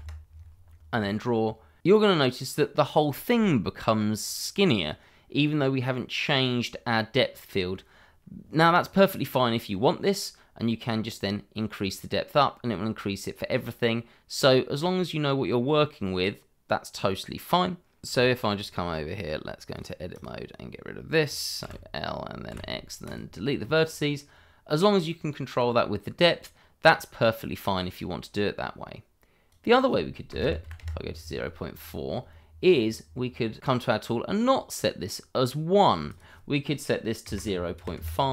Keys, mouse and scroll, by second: 0.1 middle click, 0.4 click, 2.0-2.6 scroll up 1, 2.6 middle click, 7.4 middle click, 11.1 click, 19.7 click, 20.1 double click, 21.6 l, 23.0 click, 25.6 click, 30.3 0, 30.4 ., 30.6 4, 30.8 Return, 33.6 click, 36.0 click, 37.2 0, 37.3 ., 37.7 KP_5, 37.9 Return.